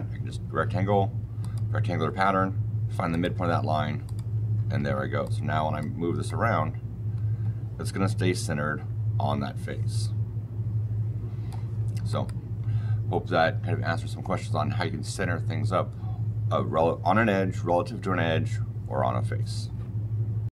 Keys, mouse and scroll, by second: 1.3 click, 3.0 click, 3.9 click, 4.7 Escape, 5.1 click, 6.2 click, 12.0 click, 15.8 click, 20.4 click.